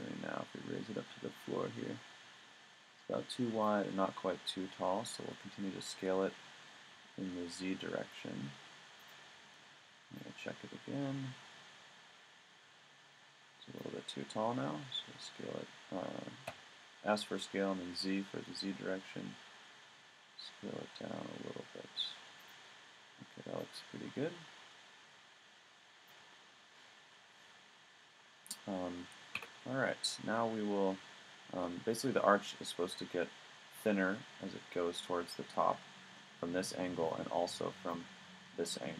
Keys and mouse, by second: 5.9 s, 9.1 click, 14.7 s, 22.5-25.3 middle drag, 26.2 click, 27.4-29.8 middle drag, 29.4 a, 37.1 middle click, 37.4 middle click.